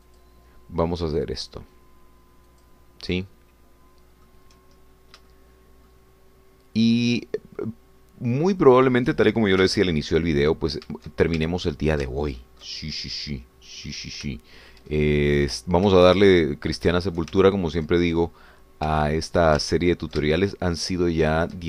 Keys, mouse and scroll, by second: 1.1 shift+click, 3.7 shift+click, 4.1-5.5 shift+middle drag, 5.9 shift+scroll down 2, 6.3 shift+middle click, 8.1 shift+click, 9.6 shift+click, 10.6 f, 11.0 d, 11.4-11.9 scroll down 2, 12.5-13.8 shift+middle drag, 13.8 ctrl+scroll down 2, 14.2 middle click, 15.4 shift+middle click, 16.0-16.8 shift+scroll down 5, 17.0-18.3 shift+middle drag, 18.3 ctrl+shift+click, 19.4-21.6 drag.